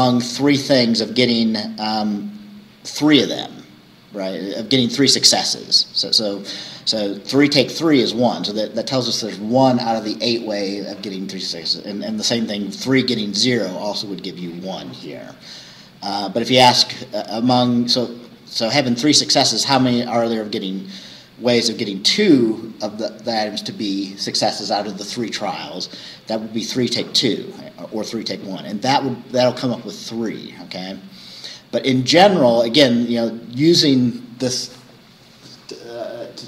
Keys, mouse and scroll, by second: 0.5 scroll down 2, 1.1 scroll up 2, 2.1-2.4 scroll down 2, 3.4-3.7 scroll up 2, 4.4 scroll up 2, 5.4-5.7 scroll down 2, 7.3-7.6 scroll up 2, 11.0-11.5 scroll down 2, 15.2-15.5 scroll up 2, 16.9 scroll down 2, 18.1 scroll up 2, 19.3-20.4 scroll down 4.